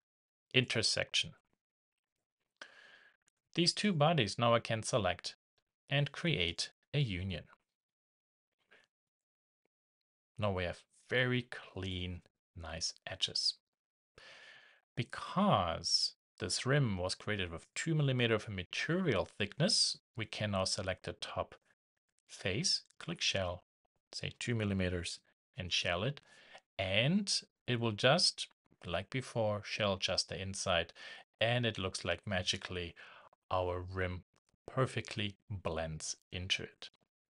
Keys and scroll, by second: 25.0 shift+Return.